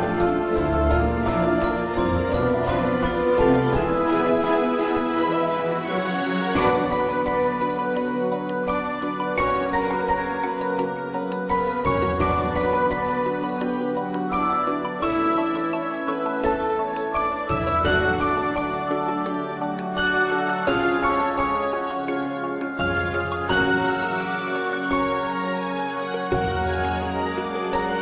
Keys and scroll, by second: 12.8 a.